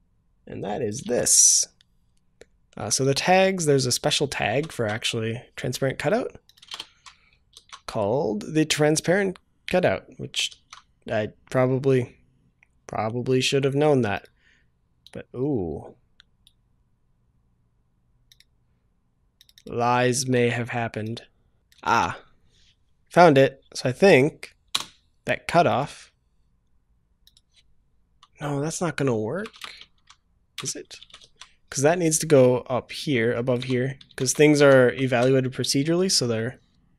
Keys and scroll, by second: 4.6 ctrl+v, 4.7 ctrl+s, 7.5 ctrl+s, 10.5 ctrl+s, 21.9 ctrl+c, 31.0 ctrl+v, 31.2 ctrl+s, 35.0 ctrl+s.